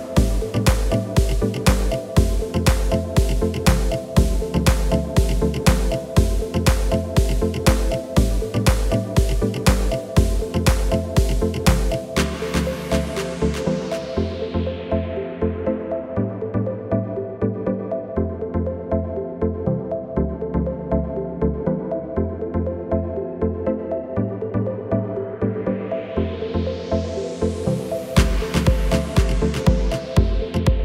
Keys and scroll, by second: 4.3 Delete.